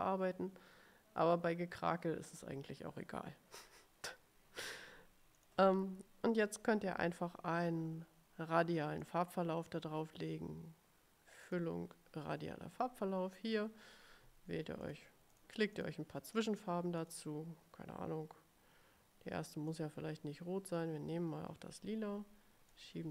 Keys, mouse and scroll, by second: 5.5 click, 9.2 click, 11.6 click, 15.0 click, 15.5 click, 15.9 click, 17.1 click, 19.8 click, 20.8 click, 22.8-23.1 drag.